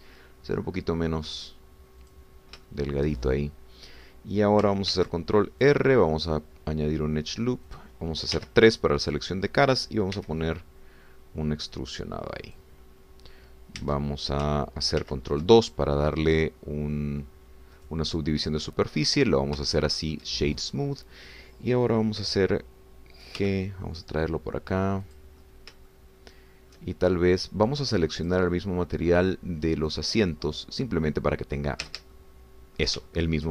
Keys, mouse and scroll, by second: 0.1 shift+s, 3.1 click, 3.6 shift+middle click, 5.9 ctrl+r, 6.7 click, 8.7 click, 9.3 3, 10.0 click, 11.2 e, 13.5 click, 14.9 Tab, 16.1 ctrl+2, 16.6-18.8 ctrl+middle drag, 20.0 click, 20.7 shift+middle click, 24.4 g, 26.1 click, 26.4-27.9 shift+middle drag, 29.2 click, 32.7 shift+middle click, 33.2 shift+middle click.